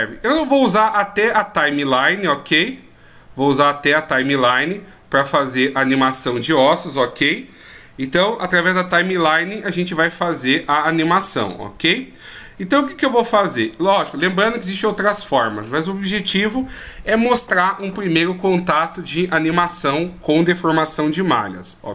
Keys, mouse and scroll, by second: 2.5-3.0 scroll up 5.